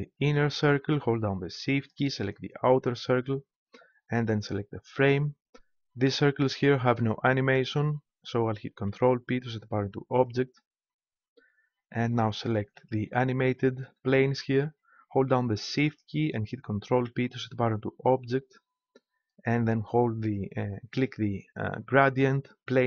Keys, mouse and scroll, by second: 0.1-1.9 right drag, 8.8 ctrl+p, 12.8-14.6 right drag, 15.7-16.9 right drag, 16.9 ctrl+p, 20.4-22.1 right drag.